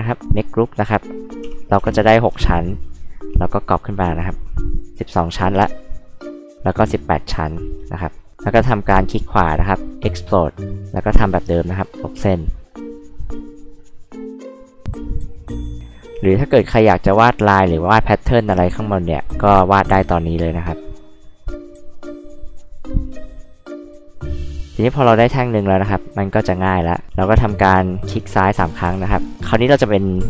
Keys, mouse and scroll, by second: 0.2 click, 1.4 n, 1.8 m, 2.7 ctrl+click, 4.1 ctrl+click, 6.0 ctrl+click, 7.5 ctrl+click, 9.1 right click, 10.6 click, 10.8 click, 12.1 e, 12.3 click, 13.1 click, 13.6 click, 14.8 click, 15.9 click, 16.3 click, 17.1 click, 18.4 scroll up 2, 18.5 h, 18.6-18.9 drag, 19.4-19.7 drag, 19.9 e, 20.1 click, 21.7 click, 23.1 click, 23.6 click, 24.1 click, 26.1 click, 27.2 space, 28.0 click, 28.2 click, 28.3 click, 28.6 click, 28.9 h.